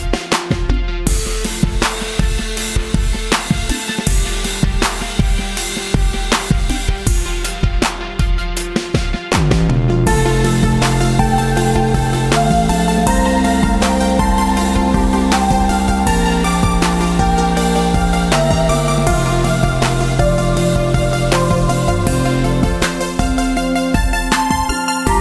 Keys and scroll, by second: 18.8 ctrl+d, 19.0 ctrl+d, 19.4 ctrl+d, 19.8 ctrl+d.